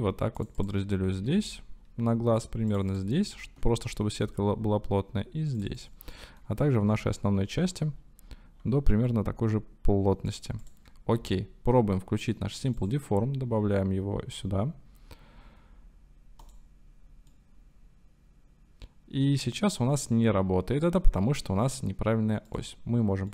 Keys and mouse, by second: 0.6 click, 1.2 ctrl+r, 3.0 click, 3.4 ctrl+r, 5.8 click, 6.7 ctrl+r, 10.6 click, 11.2 Tab, 12.8-16.5 drag, 17.4-21.7 middle drag, 22.5 click.